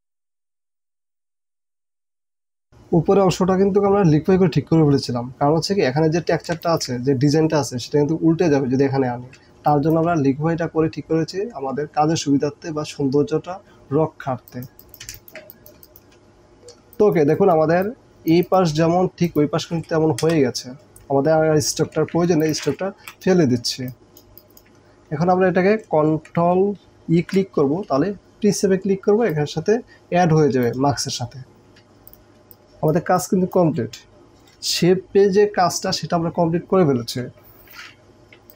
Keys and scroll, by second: 0.5 space, 1.0 space, 1.5 space, 2.2 space, 9.8 space, 14.5 space, 15.2 alt+space, 15.9 alt+space, 16.8 space, 20.2 Delete, 22.0 ctrl+alt+z, 23.0 Delete, 23.7 space, 27.2 ctrl+e, 32.0 space, 38.2 j, 38.3 space.